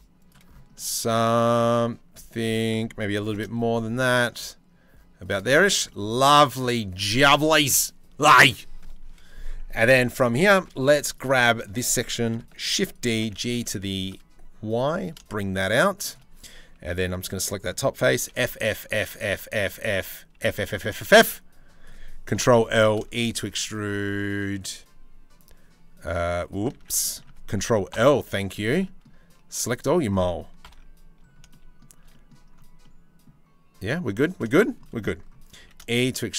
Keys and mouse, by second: 0.3 middle click, 2.0 ctrl+z, 2.8 ctrl+b, 5.4 Tab, 5.8 middle click, 9.6 Tab, 10.2 2, 12.2 shift+d, 12.7 g, 16.2 2, 16.5 click, 17.9-20.8 typing, 21.9 ctrl+l, 22.4 e, 26.3 ctrl+z, 26.6 middle click, 27.5 ctrl+l, 30.2 ctrl+l, 34.0 shift+middle click, 35.2-36.3 shift+middle drag, 35.2 e.